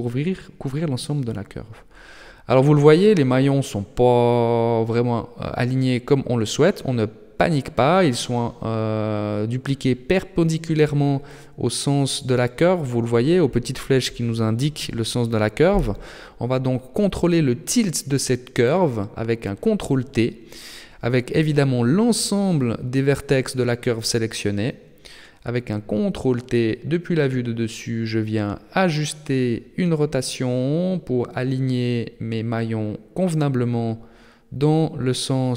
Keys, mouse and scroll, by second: 1.0 middle click, 2.2 right click, 3.2 Tab, 4.7 KP_7, 5.7 shift+middle click, 6.2-6.6 scroll up 7, 9.2 middle click, 10.4 shift+middle click, 11.1 middle click, 12.1 middle click, 14.8 KP_7, 20.1 ctrl+t, 23.6 scroll down 6, 24.1 shift+middle click, 25.8 ctrl+t, 32.6 middle click, 34.0 middle click.